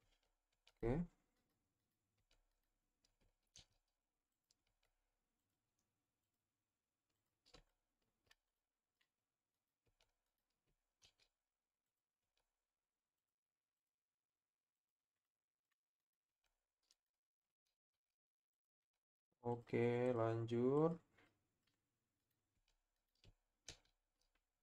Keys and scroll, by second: 0.2 Tab, 0.5 Tab, 2.2 Tab, 3.5 shift+s, 4.7 Tab, 9.9 Tab, 11.0 shift+s, 12.2 Tab, 16.5 Tab, 17.8 shift+s, 18.8 Tab, 22.7 Tab, 23.7 shift+s.